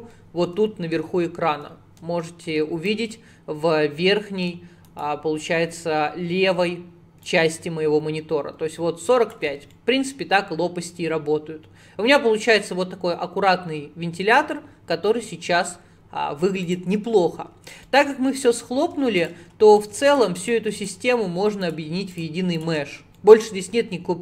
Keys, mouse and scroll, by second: 7.3 ctrl+click, 9.8-12.8 middle drag, 14.4-15.1 scroll down 1, 15.1-16.1 middle drag, 16.1 scroll up 2, 16.7 click, 17.9-19.2 middle drag, 19.2 shift+click, 19.7 shift+click, 20.1 shift+click, 20.5 shift+click, 20.8 shift+click, 21.7 shift+click, 22.1 shift+click, 22.6 shift+click, 23.2-24.2 middle drag.